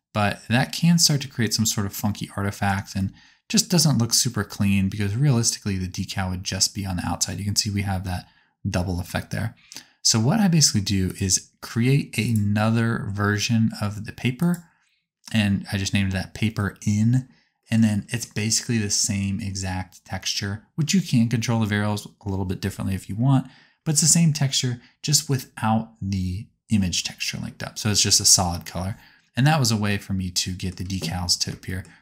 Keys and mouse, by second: 6.5-11.4 drag.